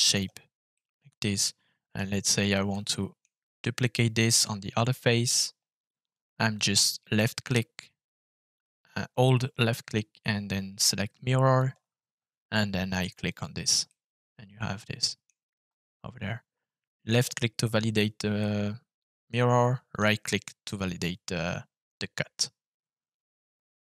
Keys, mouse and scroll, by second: 0.0 click, 0.7-1.9 middle drag, 2.7 middle click, 6.5 click, 13.2 click, 13.8-15.2 middle drag, 15.5-16.2 scroll down 1, 16.2-16.8 scroll down 1, 17.1 click, 18.3 middle click, 20.0 right click, 20.9-23.9 middle drag.